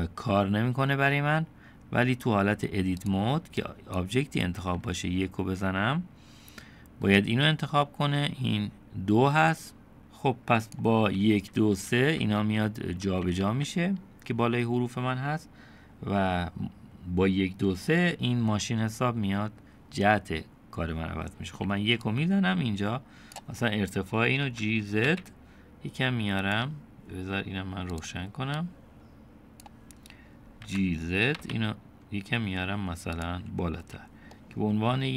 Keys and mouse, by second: 3.1 click, 3.6 click, 10.0 click, 11.2-13.5 typing, 21.5 1, 22.1-23.4 drag, 24.5 g, 26.5-27.6 right drag, 28.0 click, 28.7 click, 30.7 g, 33.8 Tab, 34.3-35.1 middle drag.